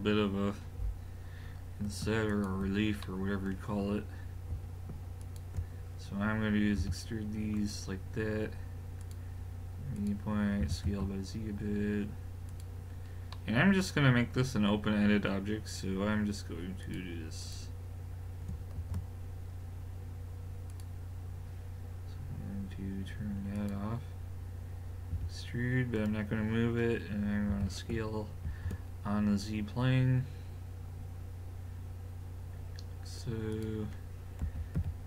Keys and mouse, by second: 2.3 click, 3.0 middle click, 5.2 click, 6.8 e, 9.1 click, 10.6 s, 13.0 click, 16.8 click, 18.8 shift+s, 23.6 click, 25.1 e, 27.5 s, 34.4 w.